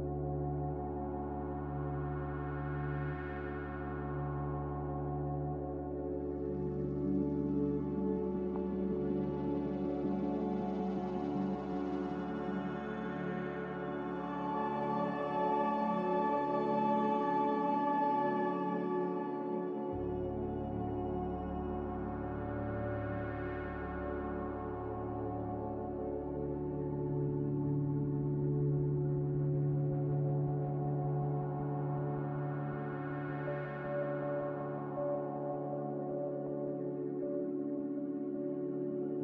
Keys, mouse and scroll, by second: 13.8 click, 16.2 click, 19.5 q, 24.7 z, 28.3-29.1 typing, 29.1 Return, 33.8-34.6 typing, 38.1 1.